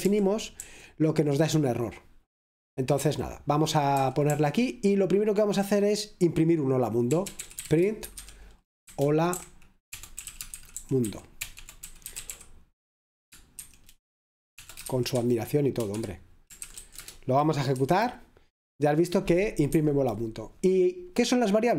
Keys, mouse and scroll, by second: 1.9 typing, 3.0 typing, 5.5-7.8 typing, 8.9-12.8 typing, 15.9 Escape, 15.9-17.7 typing, 17.7 F5, 19.2 typing, 19.8 Escape.